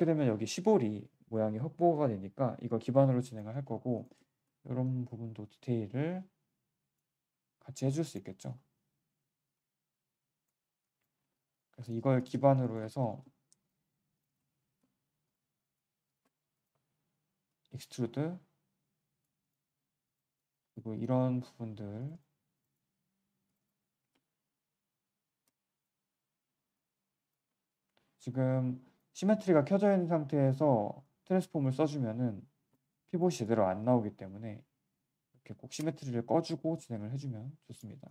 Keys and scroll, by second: 11.1 q, 27.4 z, 30.8 w.